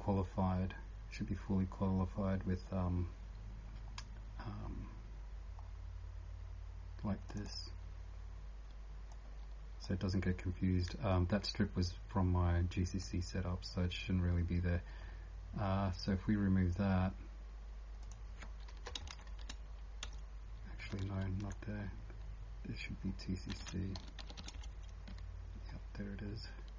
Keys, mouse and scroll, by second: 0.2-2.6 typing, 3.2 scroll up 16, 4.0 scroll down 1, 5.3 scroll down 16, 7.2 click, 11.6 scroll down 1, 14.7 scroll down 1, 15.4 scroll, 17.9 scroll down 3, 18.0 click, 18.0 scroll up 8, 19.1 shift+Home, 19.3 shift+Home, 20.0 BackSpace, 21.1 ctrl+z, 21.8-22.2 scroll down 3, 23.1 scroll down 2, 23.6 ctrl+f, 24.0 t, 25.1 Escape.